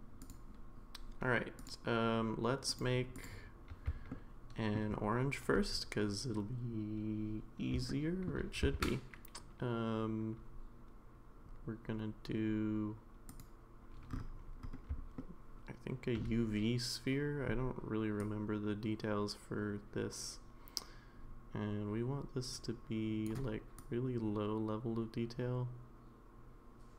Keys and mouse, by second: 0.2 click, 1.6 click, 2.7 click, 3.1 click, 4.1-4.8 shift+middle drag, 7.9-8.3 shift+middle drag, 8.7 shift+a, 15.2-16.2 shift+middle drag, 18.2-23.2 drag, 23.8-26.9 drag.